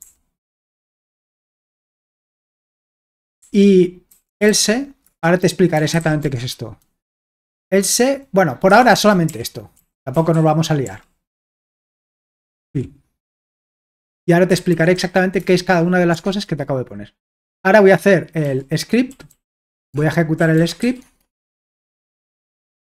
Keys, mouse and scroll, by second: 0.0 o, 1.2-6.7 typing, 5.0 Return, 8.7 Escape, 8.9-12.7 typing, 13.3 Escape, 14.7-15.5 typing, 16.3 alt+Tab, 18.4-21.3 typing, 21.7 Return.